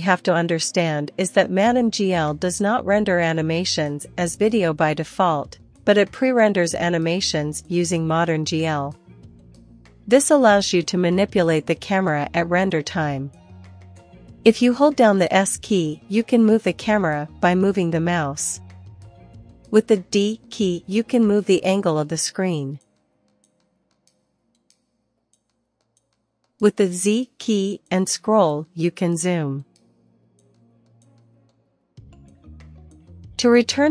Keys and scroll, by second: 2.6 Return, 5.8 1, 6.8 Return, 14.0-15.0 typing, 17.4-30.0 typing, 31.5-33.9 typing.